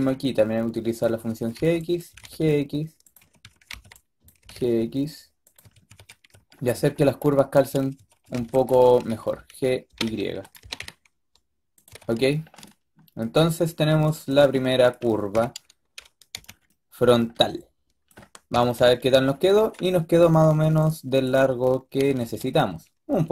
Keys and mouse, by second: 0.9-2.0 typing, 3.1-4.3 typing, 5.5 a, 5.8 a, 6.5 a, 7.9 a, 8.1 a, 8.2 b, 8.8 g, 10.5 g, 11.8 a, 14.2-15.2 drag, 15.2 KP_5, 15.3 click, 16.2 z, 18.4 KP_3, 18.7 KP_5, 21.2-21.9 drag, 22.1 z.